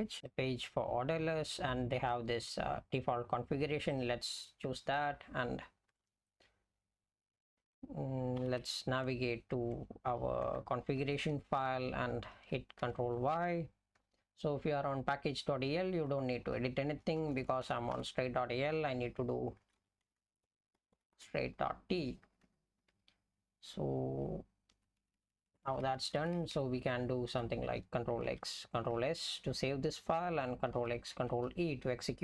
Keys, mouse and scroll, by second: 6.7 BackSpace, 8.4 ctrl+g, 9.7 Tab, 10.4 Tab, 11.0 Return, 12.8 ctrl+y, 14.0 Up, 14.2 Up, 15.3-16.0 Right, 16.4 Right, 17.0-17.9 typing, 19.4-21.7 typing, 22.3 Down, 22.5 Down, 22.9 Up, 23.3-24.8 Right, 25.0 Right, 25.2 Right, 25.3 Right, 25.6 Right, 25.7 Right, 25.8 Right, 26.0 Right, 26.2 Right, 26.3 Right, 26.6 Right, 27.3 Left, 29.0 ctrl+s, 31.4 ctrl+e.